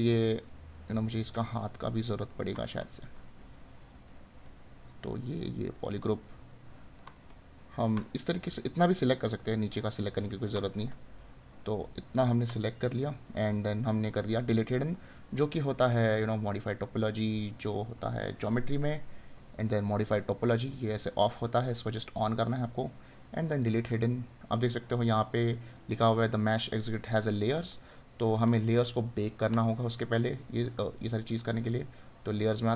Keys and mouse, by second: 7.3 right click, 10.8 right click, 13.3 right click.